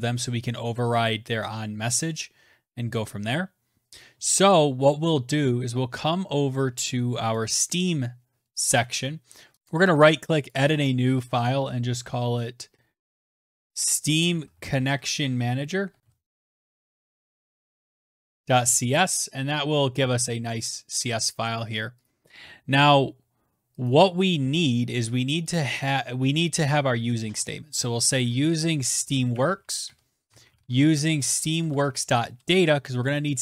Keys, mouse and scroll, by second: 6.2 click, 8.5 right click, 9.5 Escape, 9.5 right click, 9.5 click, 11.9-18.1 typing, 20.8 click, 22.6 click, 23.3 scroll down 2, 23.3 scroll, 24.3 click, 26.3-32.2 typing.